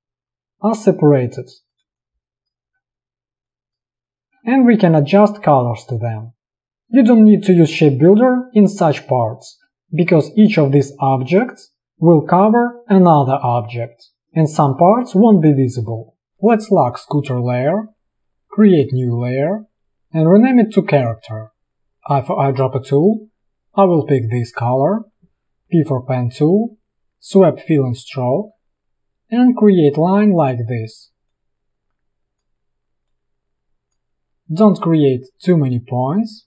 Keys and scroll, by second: 2.0 space, 4.6 v, 6.2 space, 9.1 space, 14.2 space, 22.2 i, 25.8 p.